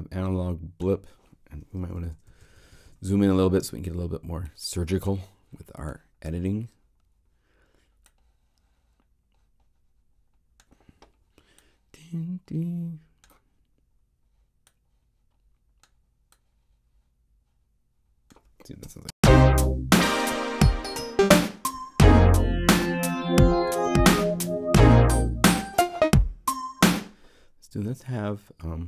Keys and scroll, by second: 2.0 super+Right, 18.8 0, 19.1 Home, 23.7 super+Left.